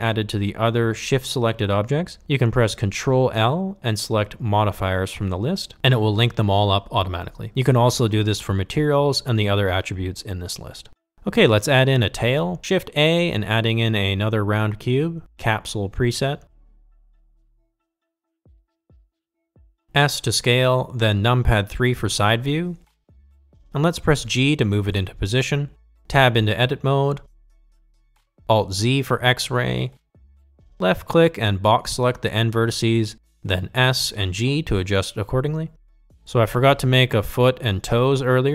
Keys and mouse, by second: 0.3 ctrl+l, 13.0 shift+a, 18.0-19.5 drag, 20.4 s, 23.7 g, 23.7 KP_3, 24.3 shift+middle drag, 25.1 g, 27.0 ctrl+z, 27.9 Tab, 30.3 alt+z, 31.4 click, 32.5 g, 34.6 s, 36.7 g, 36.8 shift+KP_3, 36.9 shift+middle click.